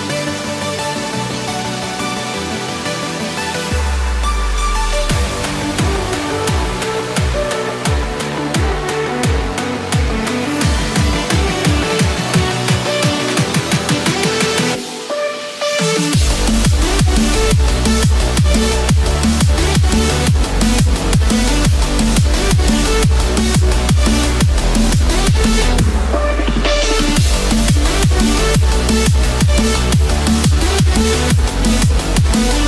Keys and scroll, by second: 0.0 ctrl+-, 9.6 ctrl+z, 10.4 ctrl+z, 27.6 ctrl+=.